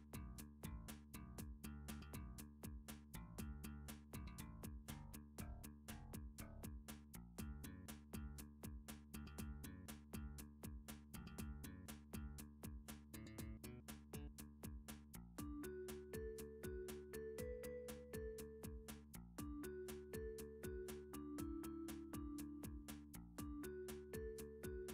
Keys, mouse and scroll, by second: 1.7 shift+click, 4.0 middle click, 4.8 f, 5.7 middle click, 6.6 middle click, 7.5 click, 7.9 shift+click, 8.9 middle click, 9.5 shift+middle click, 10.5 middle click, 11.4 shift+click, 12.4 f, 13.2 middle click, 13.6 click, 14.2 middle click, 15.8 middle click, 16.1 middle click, 16.4 shift+middle click, 16.7 shift+middle click, 17.0 shift+click, 18.1 middle click, 18.8 shift+click, 20.9 middle click, 21.5 f, 22.1 click, 22.4 shift+click, 22.9 scroll, 24.7 middle click, 24.8 shift+click.